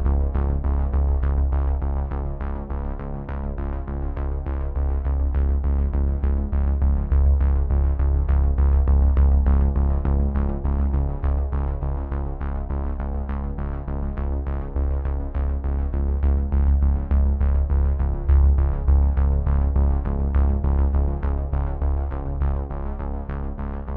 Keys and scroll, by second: 0.7 z, 6.6 space, 9.3 space, 10.4 v, 10.7 space, 21.2 space, 22.3 ctrl+n.